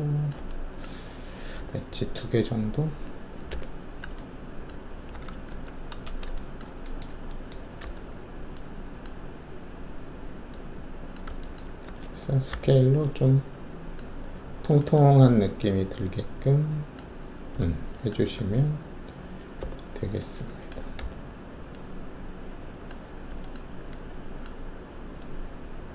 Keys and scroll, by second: 1.5 alt+e, 3.4 5, 5.1 alt+w, 5.5 alt+`, 6.0 alt+shift+a, 7.8 alt+e, 11.8 alt+w, 12.4 r, 18.3 alt+1, 19.5 4, 21.0 r.